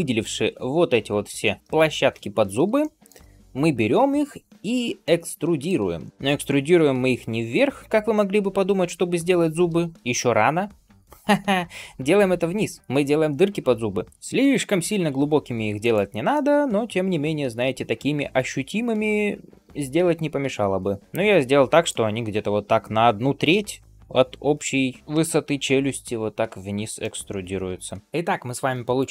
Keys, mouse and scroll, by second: 2.6 shift+middle click, 4.9 middle click, 16.2-21.7 middle drag, 21.0 alt+z, 26.8 middle click, 27.6 alt+z, 28.8 click.